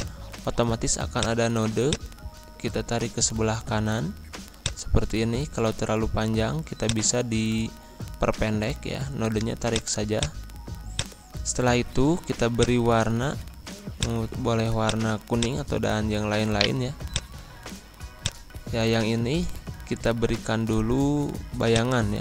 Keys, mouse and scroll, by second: 4.6-9.7 drag, 16.5 right click, 17.1 click, 21.7-22.2 drag.